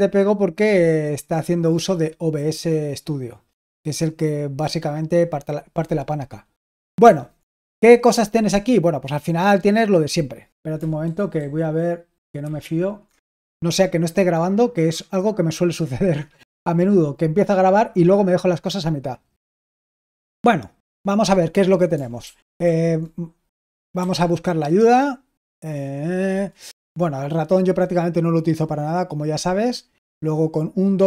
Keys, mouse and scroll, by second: 6.9 super+l, 11.0 super+h, 11.3 super+h, 12.3 super+2, 22.2 super+l, 22.5 super+l, 23.9 h.